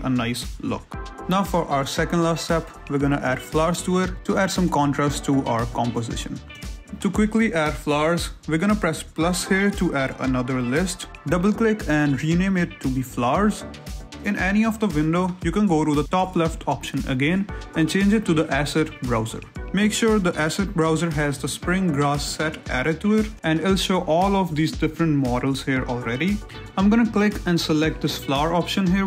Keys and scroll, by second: 0.4 Escape, 0.5 ctrl+z, 1.3 a, 1.9 g, 2.4 Escape, 12.2 r, 12.4 Return.